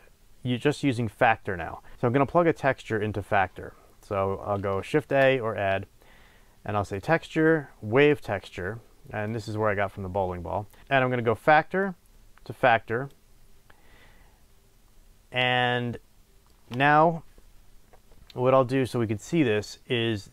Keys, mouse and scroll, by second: 4.9 shift+a, 6.0-7.0 middle drag, 9.5 click, 11.8 click, 15.7-20.1 middle drag.